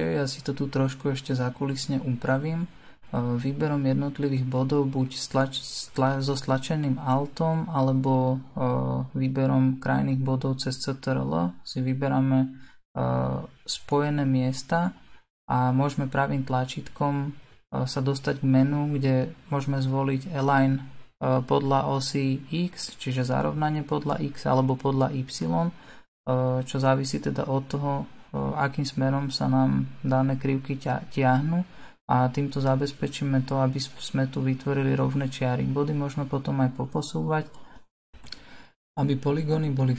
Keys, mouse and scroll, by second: 4.8 g, 6.1 click, 6.4 alt+click, 6.9 alt+click, 7.5 click, 8.1 ctrl+click, 8.6 right click, 9.0 g, 10.6 click, 11.5 l, 11.8 g, 12.9 click, 13.0 l, 13.3 g, 14.2 click, 14.5 l, 14.9 r, 15.8 g, 17.3 click, 18.6 click, 20.4 click, 20.8 l, 21.3 s, 22.4 g, 23.8 s, 24.6 g, 25.9 click, 26.6-28.6 middle drag, 28.6 click, 29.4-31.0 middle drag, 31.0 click, 31.9 l, 33.5 right click, 34.1 alt+click, 34.5 right click, 34.8 alt+click, 35.3 right click, 35.6 alt+click, 36.0 right click, 36.7 click, 37.7 click, 38.5 l, 38.8 g.